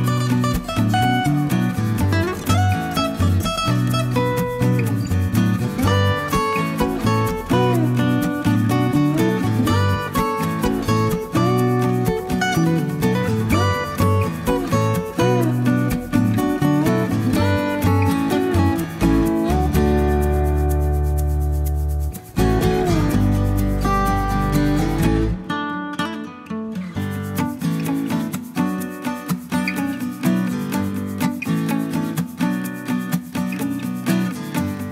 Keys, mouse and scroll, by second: 0.4-5.1 drag, 5.9-10.7 drag, 11.1 1, 15.1 click, 17.3 click, 20.7 click, 24.3 1, 25.3 0, 26.8 click, 30.5 middle click, 31.0-31.4 scroll up 1, 32.2-32.8 scroll down 1, 33.7 click.